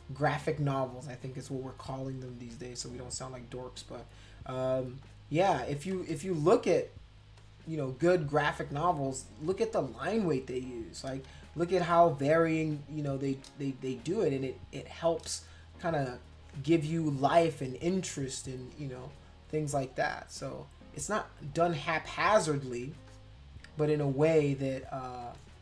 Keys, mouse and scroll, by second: 0.7 shift+click, 2.3 shift+click, 3.8 click, 5.0 shift+click, 6.0 space, 6.1 click, 6.7 click, 7.4 click, 9.1 click, 10.6 shift+click, 11.3 ctrl+z, 12.1 click, 12.6 shift+click, 15.9 click, 16.4 click, 16.8 click, 17.2 click, 17.9 click, 18.3 click, 18.6 click, 18.9 click, 19.5 click, 19.7 click, 20.0 click, 20.8 click, 21.6 click, 23.0 space, 23.1 click, 24.0 click, 24.4 click, 24.8 click, 25.2 space, 25.3 click.